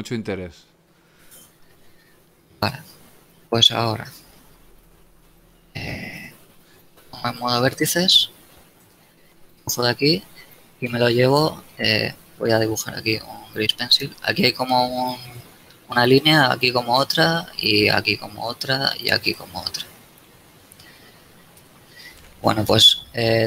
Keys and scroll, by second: 5.2 ctrl+Tab, 6.2 ctrl+Tab, 7.8 ctrl+a, 8.5 b, 13.5 d, 21.6 n.